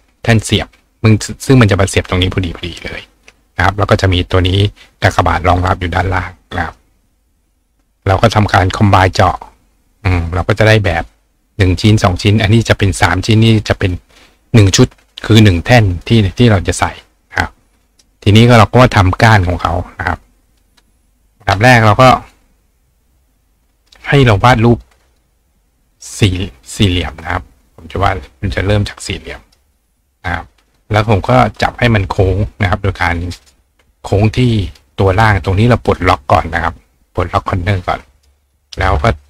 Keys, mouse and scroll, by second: 6.6 right click, 9.3 click, 10.1 click, 10.5 click, 16.0 click, 16.3 right click, 17.3 right click, 18.3 click, 19.5 click, 22.2 click, 24.7 click, 25.1 click, 26.0-27.2 ctrl+drag, 29.4 click, 30.7 click, 34.5 click, 38.0 click.